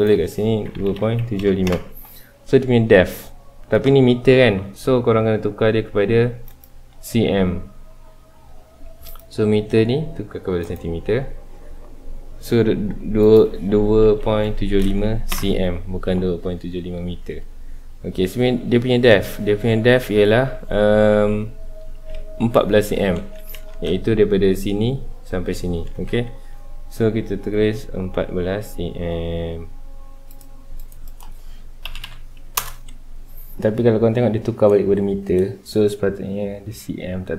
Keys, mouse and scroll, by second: 1.7 KP_Enter, 6.4-12.1 drag, 13.2-15.3 drag, 15.3 KP_Enter, 17.0-20.1 scroll up 2, 21.0 Escape, 26.0 Tab, 30.3 click, 31.0-32.6 drag, 32.6 Return.